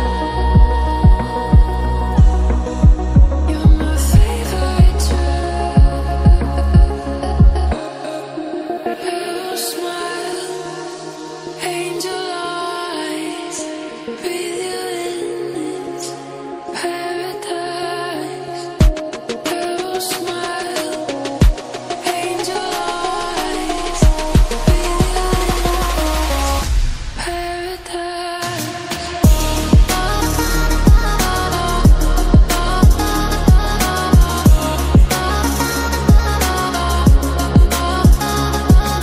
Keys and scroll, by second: 3.3 Return, 6.4 ctrl+z, 6.7 ctrl+z, 10.1 ctrl+z, 11.2 typing, 12.6-13.9 typing, 26.8 ctrl+z, 32.1 ctrl+d.